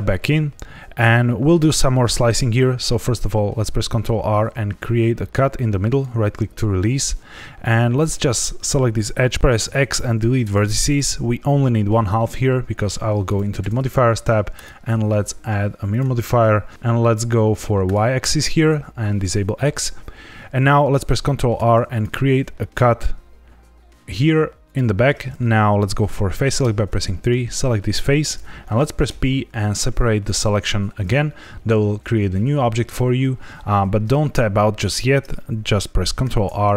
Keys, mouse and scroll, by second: 1.2 shift+middle click, 3.7 ctrl+r, 5.8 right click, 7.9 click, 9.3 x, 9.4 ctrl+z, 9.5 x, 13.2 click, 15.9 click, 16.7 click, 17.4 click, 21.5 ctrl+r, 24.6 click, 26.5 3, 27.1 click, 29.0 p, 36.2 ctrl+r.